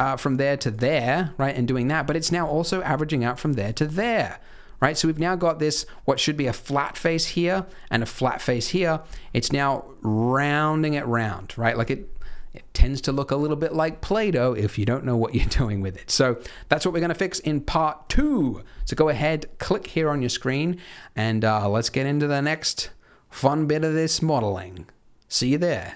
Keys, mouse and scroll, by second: 0.1 shift+click, 0.6 click, 1.6-1.9 scroll up 4, 1.9 middle click, 2.7 click, 3.3 shift+click, 3.6 shift+click, 4.0 middle click, 4.7 middle click, 4.8 scroll up 2, 5.0 middle click, 5.5 scroll down 1, 7.5 middle click, 7.8 scroll down 1, 8.5 middle click, 8.8 scroll up 2, 9.1 middle click, 12.2 scroll down 1, 15.6-16.0 scroll up 2, 15.8 middle click, 16.4-17.4 scroll down 5, 16.5 Tab, 17.4 scroll down 4, 17.6 middle click.